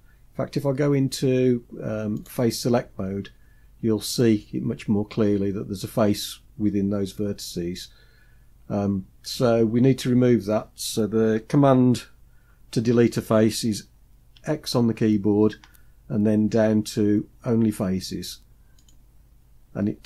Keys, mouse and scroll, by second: 2.0-3.5 drag, 14.2 x, 15.5 x.